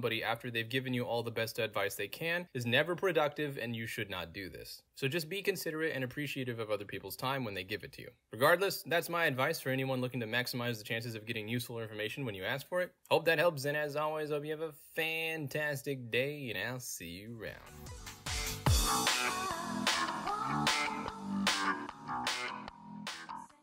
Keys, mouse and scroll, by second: 0.4-1.7 middle drag, 2.0 middle click, 2.0 scroll down 2, 3.0 click, 3.6-4.7 middle drag, 3.6-4.7 scroll down 2, 4.7-6.0 scroll down 1, 6.0 scroll down 1, 6.2 click, 6.7-8.0 scroll down 2, 8.0-9.0 scroll down 1, 9.0 scroll down 1, 9.3 click, 9.7-11.0 scroll down 2, 9.8-23.6 middle drag, 11.0-12.0 scroll down 1, 12.0-13.0 scroll down 1, 13.0-14.0 scroll down 1, 14.0-14.7 scroll down 1, 14.7-15.6 scroll down 1, 15.6-16.7 scroll down 1, 16.7-23.6 scroll down 1.